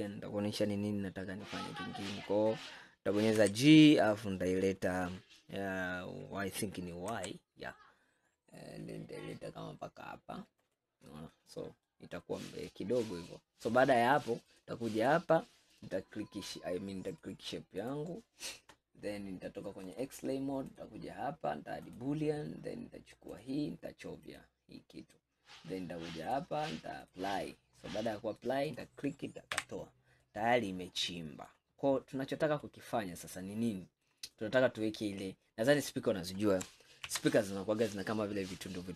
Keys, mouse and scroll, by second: 3.4 g, 11.4 middle click, 12.0-12.7 scroll down 2, 12.7-14.5 middle drag, 14.5-15.9 drag, 17.2 click, 20.0-20.7 drag, 22.0-23.5 drag, 26.3-28.1 drag, 28.1 scroll down 1, 28.2-28.8 middle drag, 28.8 click, 29.6 Delete, 30.3-31.8 middle drag, 31.8-32.8 scroll up 4, 32.8-35.1 middle drag, 35.1 scroll up 2, 35.6-37.1 middle drag, 37.1 ctrl+s.